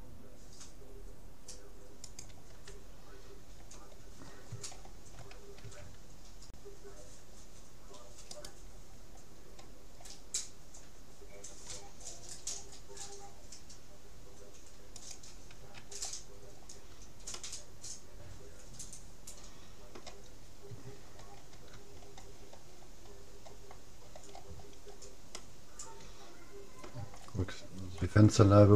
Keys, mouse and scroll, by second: 4.1-5.5 middle drag, 5.6 a, 8.3-10.1 right drag, 10.1-12.5 middle drag, 11.6 g, 15.6 a, 15.9-19.1 middle drag, 20.5-22.5 middle drag, 20.9 scroll up 1, 22.5-23.9 scroll up 1, 23.9-25.1 middle drag, 25.3-27.1 middle drag.